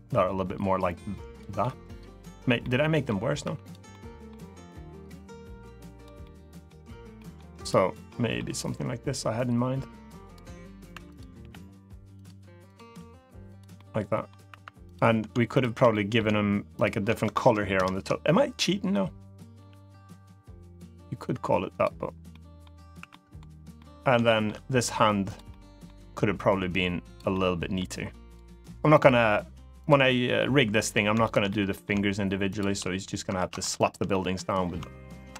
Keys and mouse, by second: 1.3 middle click, 2.3 middle click, 3.2 3, 3.4 click, 3.6 middle click, 4.4-5.8 drag, 5.9 middle click, 6.9 middle click, 7.3 click, 7.8 middle click, 8.5-10.1 drag, 10.6 2, 10.9 click, 11.1 g, 11.9 click, 12.5 click, 12.6 g, 13.2 click, 13.5 middle click, 14.2 3, 14.6 click, 15.3 shift+click, 15.6 middle click, 17.5 ctrl+KP_Add, 19.3 g, 21.4 click, 22.0 middle click, 22.7 3, 22.8 middle click, 23.5 middle click, 24.0 shift+middle click, 25.1 click, 25.2 middle click, 25.9 g, 26.8 click, 27.0 middle click, 28.0 click, 29.5 click, 29.8 middle click, 31.0 click, 31.2 middle click, 32.3 shift+click, 33.1 ctrl+z, 33.8 middle click, 34.9 ctrl+KP_Enter, 35.3 ctrl+KP_Add.